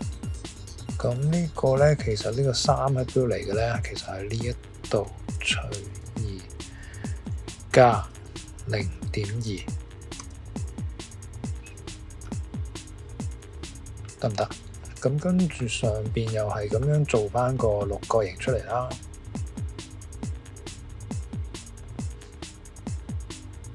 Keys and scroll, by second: 5.7 typing, 7.7-10.1 typing, 14.1 typing, 17.2 typing.